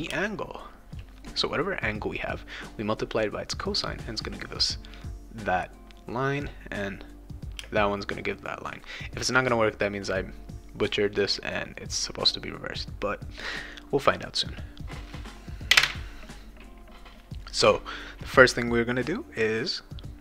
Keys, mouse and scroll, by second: 0.1 space, 0.4 click, 7.9 click, 12.3 click.